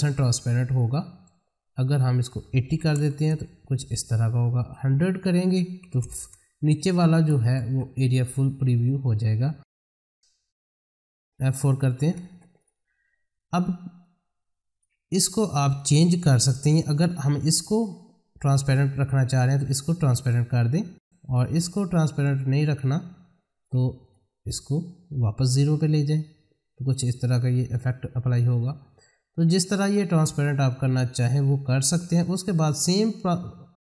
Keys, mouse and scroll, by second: 5.1 click, 9.7 F4, 10.8 click, 11.4 space, 11.7 F4, 12.2 space, 12.6-27.1 drag, 27.1 ctrl+click, 30.7-33.8 drag.